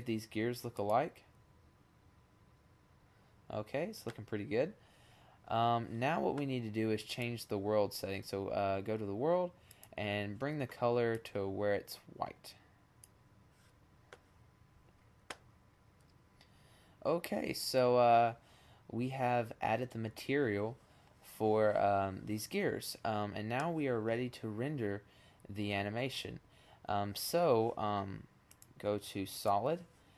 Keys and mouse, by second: 27.8-28.9 middle drag.